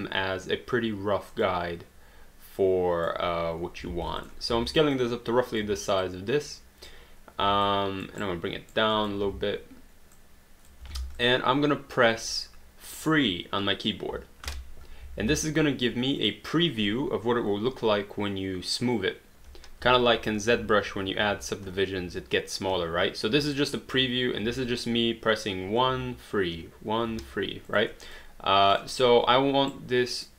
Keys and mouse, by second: 1.3 click, 2.6 click, 3.9 alt+d, 4.2 click, 4.5 r, 4.9 click, 5.6 w, 6.0 click, 7.7 click, 8.2 right click, 8.9 click, 9.2 w, 10.2 click, 11.2 click, 15.2 alt+d, 16.2 click, 19.6-27.1 typing, 27.7 click, 29.7 right click.